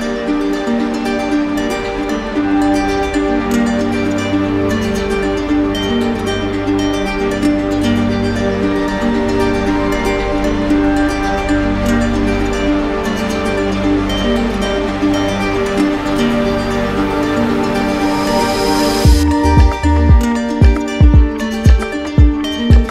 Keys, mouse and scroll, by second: 0.9 alt+right click, 1.8 alt+right click, 2.7 z, 3.5 click, 4.5 right click, 6.6 click, 6.9 click, 7.6 right click, 9.1 click, 9.4 ctrl+z, 11.1 z, 11.2 click, 11.5 click, 11.5 click, 11.7 click, 11.9 right click, 11.9 alt+right click, 12.2 right click, 12.5 click, 12.7 right click, 12.8 click, 12.9 click, 12.9 right click, 13.1 click, 13.2 right click, 13.3 shift+right click, 13.3 shift+click, 13.4 ctrl+z, 13.5 click, 13.5 ctrl+z, 13.6 click, 13.8 alt+right click, 13.8 right click, 13.9 click, 14.0 right click, 14.1 click, 14.1 alt+right click, 14.2 right click, 14.3 shift+right click, 14.6 click, 14.7 click, 14.8 right click, 14.9 ctrl+z, 14.9 right click, 15.0 click, 15.1 alt+click, 15.1 ctrl+z, 15.1 shift+click, 15.3 right click, 15.5 click, 15.7 shift+click, 15.8 shift+click, 16.0 click, 16.1 shift+right click, 16.1 alt+right click, 16.2 right click, 16.4 click, 16.4 right click, 16.5 alt+right click, 16.5 ctrl+z, 16.7 right click, 16.9 shift+click, 16.9 ctrl+z, 17.0 right click, 17.0 alt+right click, 17.1 right click, 17.5 right click, 17.5 shift+right click, 17.6 alt+right click, 17.7 click, 17.9 click, 18.0 click, 18.1 alt+right click, 18.3 alt+right click, 18.8 click, 19.0 click, 19.1 right click, 19.4 click, 19.7 click, 19.8 click, 20.0 right click, 20.1 click, 20.3 click, 20.5 click, 20.5 click, 20.7 click, 21.1 click, 21.3 click, 21.4 click, 21.7 right click, 22.1 click, 22.3 click, 22.4 click, 22.4 right click, 22.7 click, 22.7 right click, 22.8 alt+right click.